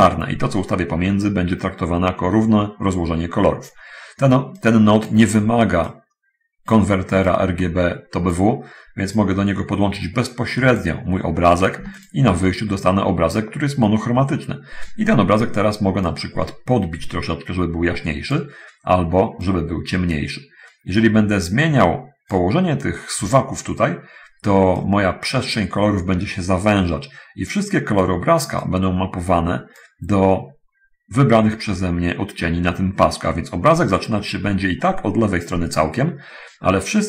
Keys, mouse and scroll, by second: 4.5-5.5 drag, 6.2 click, 7.6-8.8 drag, 9.0-11.2 drag, 12.0 ctrl+shift+click, 16.3-18.8 drag, 19.5-22.4 drag, 25.0-25.6 drag, 28.5-30.0 drag.